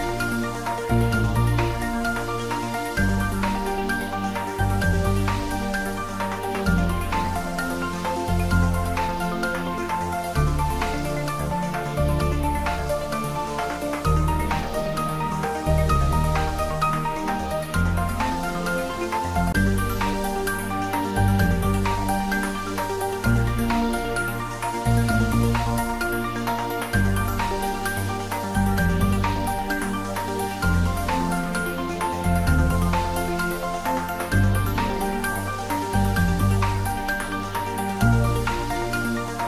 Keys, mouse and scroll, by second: 2.9 2, 3.9 Return, 5.1-5.5 scroll up 1, 9.0 click, 12.0 3, 13.0 Return, 15.2-17.7 drag, 17.7-19.6 scroll up 1, 25.0 click, 30.0 click.